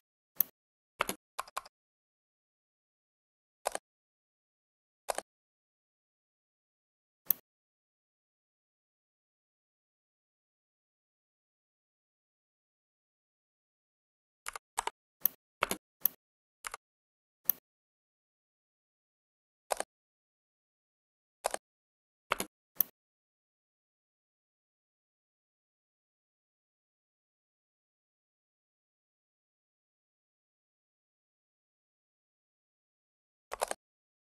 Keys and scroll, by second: 0.8 space, 1.2 Escape, 1.4 Escape, 15.5 alt+space, 22.1 space.